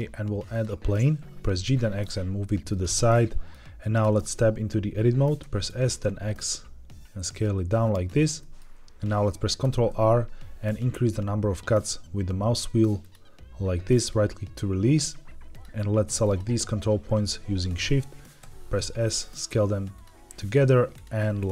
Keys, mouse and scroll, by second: 1.3 g, 1.5 x, 2.6 click, 3.0-3.4 shift+middle drag, 3.9 Tab, 5.3 s, 5.6 x, 7.8 click, 8.3 middle click, 9.5 ctrl+r, 13.9 right click, 15.4 click, 16.1 shift+click, 18.3 s, 19.8 click, 20.3 click, 20.8 click, 21.3 shift+click.